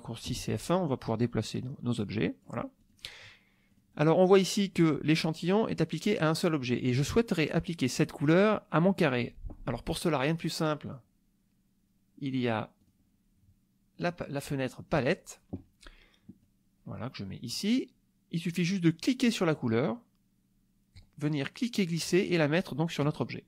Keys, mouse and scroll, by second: 0.2 F1, 1.1 click, 2.0 click, 2.8 click, 3.7 click, 10.8 click, 12.8 click, 14.0-15.3 drag, 16.4-17.7 drag, 19.3 click, 20.9-23.2 drag.